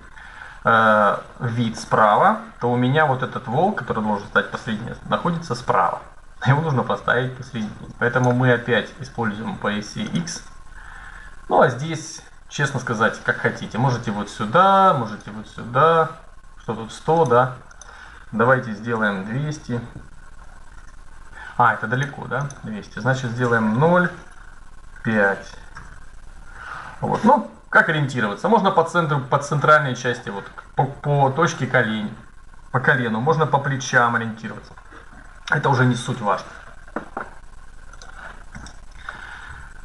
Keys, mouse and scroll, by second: 7.2-9.0 drag, 9.0 middle click, 9.8-11.6 drag, 12.3-14.2 drag, 14.8-16.5 drag, 16.9-18.6 drag, 20.2 KP_0, 21.7-23.4 drag, 31.9 right click, 34.8-36.1 middle drag, 38.6 middle click.